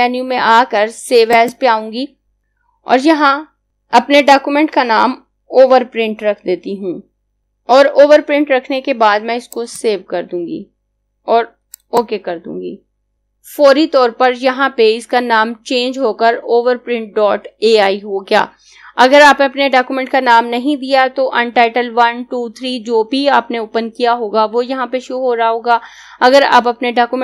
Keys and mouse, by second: 4.8-8.6 typing, 9.5 click.